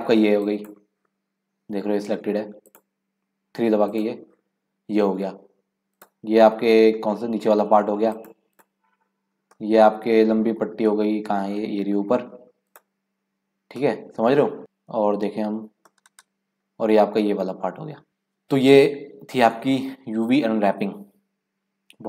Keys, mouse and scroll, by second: 0.4-2.8 drag, 3.6 3, 3.9 click, 5.9 click, 6.9 scroll down 2, 8.1 click, 8.5 click, 9.3 scroll up 1, 9.5 middle click, 10.4-10.9 scroll down 1, 10.9-12.6 middle drag, 12.6 click, 13.5 scroll up 2, 13.8 middle click, 14.4 scroll down 1, 14.6 click, 15.0 KP_Decimal, 15.6 scroll down 3, 15.9-18.1 middle drag.